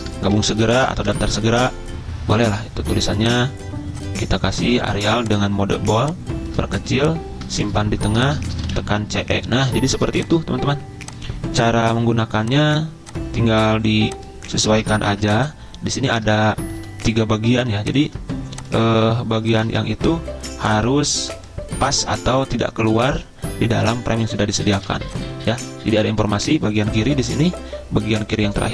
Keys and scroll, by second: 0.0-1.9 typing, 2.5 Escape, 8.5-8.9 typing, 10.0 ctrl+g, 14.5 ctrl+z, 15.1 ctrl+g, 16.8 typing, 18.1 c, 19.7 c, 24.7 z.